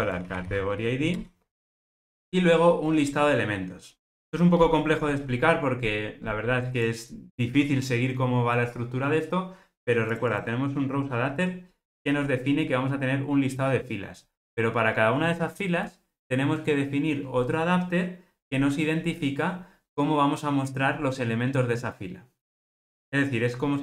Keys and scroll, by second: 1.2 Return.